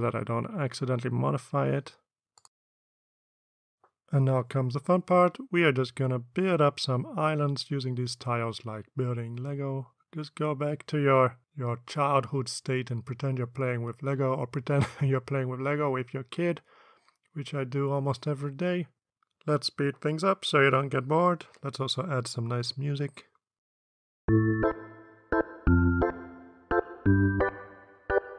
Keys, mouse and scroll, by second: 0.4 ctrl+v, 1.2 click, 4.5 click, 7.8-8.5 drag, 9.0-9.7 drag, 10.3 click, 10.7-16.8 drag, 17.3 ctrl+d, 17.6-19.1 ctrl+drag, 19.3 ctrl+d, 19.7-21.2 ctrl+drag, 21.3 ctrl+d, 21.6-23.1 ctrl+drag, 23.9-24.5 drag, 25.0 ctrl+d, 25.3-26.0 ctrl+drag, 26.2 ctrl+d, 26.2 click, 26.7 click, 27.0 drag, 27.2 shift+click, 27.4 click, 27.7 ctrl+d, 27.8 click, 28.0 ctrl+d, 28.0 ctrl+click.